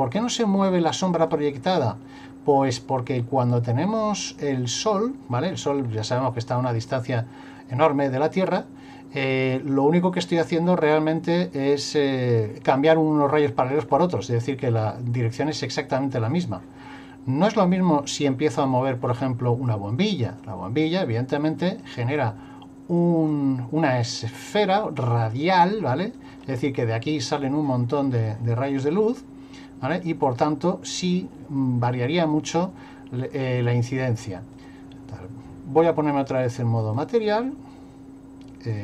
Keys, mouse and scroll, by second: 0.2 click, 1.3 click, 4.5-5.6 scroll up 1, 17.5 click, 19.1 click, 20.4 click, 21.8 click, 23.0 click, 24.0 click, 25.2 click, 26.2 click, 30.3 click, 34.6 click.